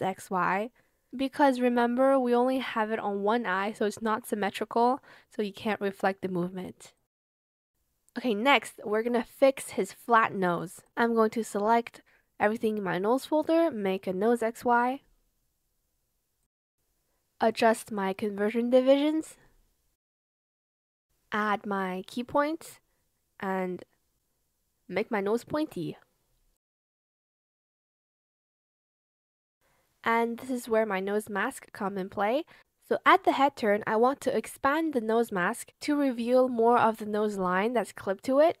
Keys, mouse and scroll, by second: 0.7 shift+click, 4.7 Return, 14.2-16.2 typing, 20.4 ctrl+click, 26.0 shift+click, 26.3 shift+click, 26.7 Escape, 27.3 ctrl+z, 27.7 shift+click, 27.8 Escape, 28.4 ctrl+z, 28.6 shift+click, 35.9 ctrl+z.